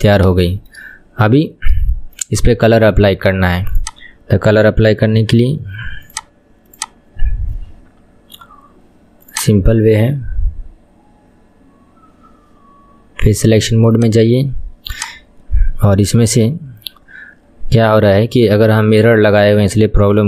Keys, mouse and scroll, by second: 0.1-0.5 scroll up 3, 0.6 shift+middle click, 0.9-1.9 scroll down 3, 2.1-2.6 shift+middle drag, 2.6 Tab, 3.9-6.3 drag, 6.8 click, 9.5 click, 12.5-13.3 scroll up 9, 13.3-14.0 scroll down 1, 14.0 click, 15.0 click, 19.0 middle click, 19.7 KP_1.